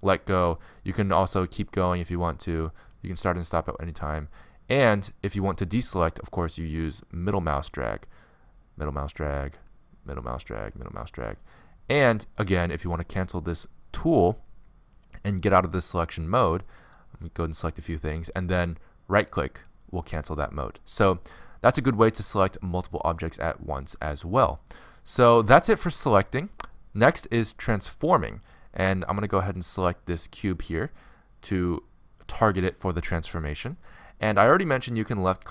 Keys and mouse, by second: 19.2-22.8 right drag, 22.8 middle click, 28.1 click, 30.5-32.3 right drag, 32.3-35.5 middle drag.